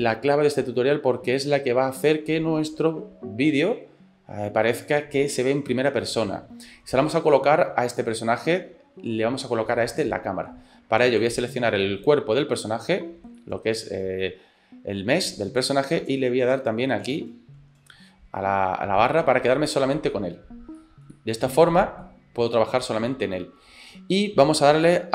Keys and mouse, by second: 9.7 middle click, 11.3 right click, 11.8 shift+middle click, 13.0 shift+middle click, 13.4-15.3 middle drag, 17.1 KP_Divide, 19.2 click, 19.7 shift+click, 20.8 shift+click, 20.9 shift+middle click, 21.1 middle click, 22.8-23.9 middle drag.